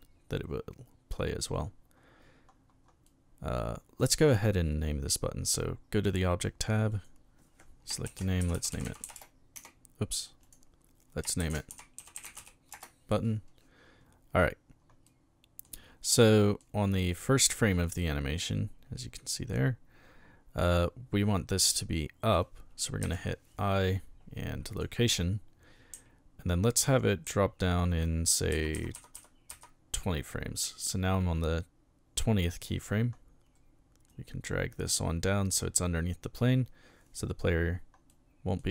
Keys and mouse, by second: 3.1-4.0 middle drag, 6.0 click, 6.9 click, 7.8-9.6 typing, 10.4 click, 11.1-12.7 typing, 15.1-15.6 middle drag, 16.3-16.6 middle drag, 19.5-20.6 middle drag, 23.0 i, 24.7 click, 25.9 Right, 27.3 Right, 28.5 Left, 28.7 Left, 28.9 Left, 29.1 Left, 29.5 Left, 34.1 click, 38.1-38.6 middle drag.